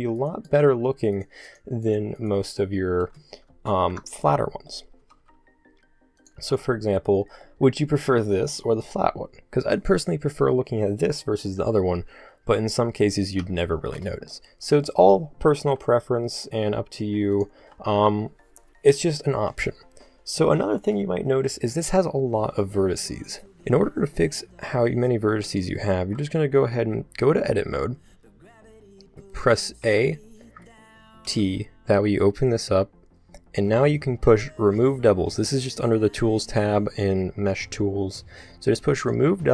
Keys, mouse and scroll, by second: 1.6 shift+right click, 3.8 ctrl+l, 5.0 s, 6.4 a, 12.1 Tab, 14.5-17.4 middle drag, 15.6 n, 17.4 click, 17.7 n, 23.9 z, 26.4 middle click, 27.4 Tab, 29.8 a, 31.3 t, 36.2-37.4 drag, 39.0 click.